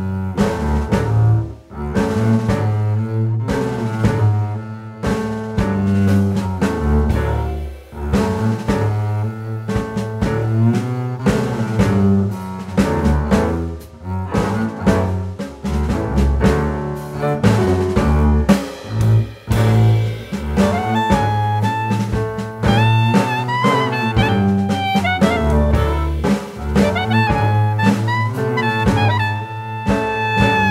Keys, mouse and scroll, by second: 0.8 click, 1.8 click, 4.3 scroll down 2, 4.5 middle click, 11.4 click, 11.9 shift+middle click, 12.3-13.4 scroll up 2, 13.4 Tab, 13.6 click, 14.0 middle click, 14.4-15.0 scroll down 4, 14.8 middle click, 15.7 scroll up 1, 15.8 middle click, 16.6 click, 18.2 click, 19.0-19.8 scroll up 2, 19.4 Tab, 19.8 click, 20.9 click, 22.8 Tab, 22.9 click, 23.2 middle click, 23.6 scroll down 1, 24.0 middle click, 24.9 ctrl+s, 25.2-26.6 scroll down 5, 25.5 shift+middle click, 26.9 click, 27.2 middle click, 27.6 middle click, 27.8 shift+middle click, 28.2 scroll down 2, 28.3 shift+middle click, 28.8 middle click, 29.8 alt+z, 30.0 click, 30.6 shift+middle click.